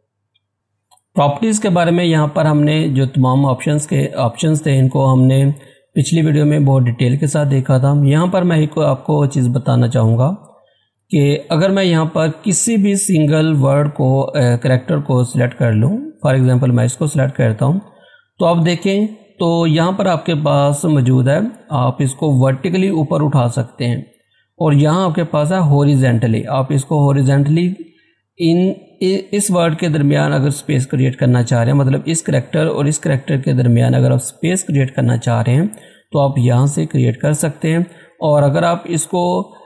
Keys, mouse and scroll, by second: 10.2 scroll up 1, 12.4 scroll down 1, 13.4 scroll up 1, 14.7-19.0 drag.